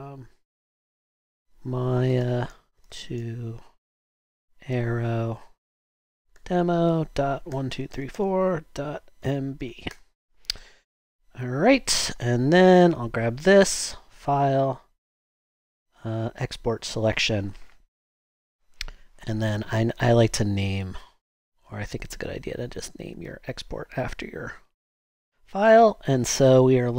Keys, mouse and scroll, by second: 1.0-10.4 typing.